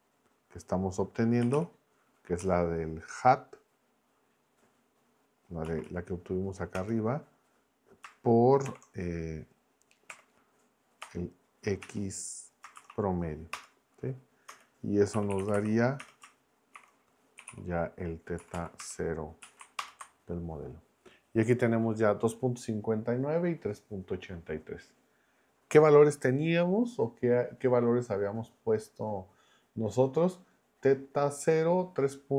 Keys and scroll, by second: 1.2-2.0 typing, 2.4 Down, 5.6 Down, 6.7 Return, 8.6 shift+8, 10.1 \, 11.0 BackSpace, 11.8 x, 12.7 shift+a, 13.5 Return, 14.9-18.0 typing, 18.4 Down, 18.8 Return, 19.4 Right, 19.8 ctrl+Return.